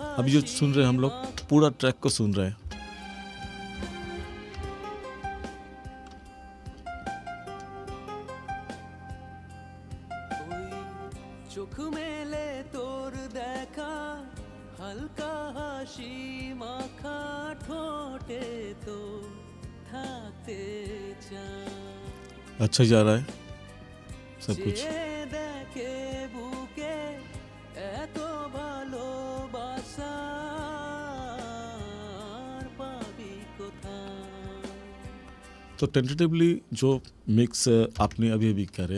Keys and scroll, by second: 1.3 space, 2.7 space, 35.7 space, 38.0 ctrl+=.